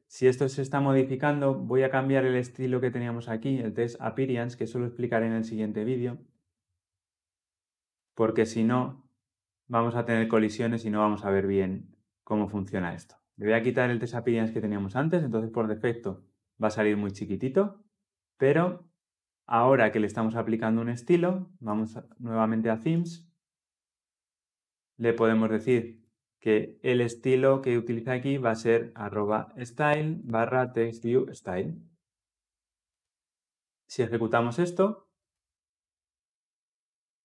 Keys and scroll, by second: 31.2 Return, 35.1 shift+F10.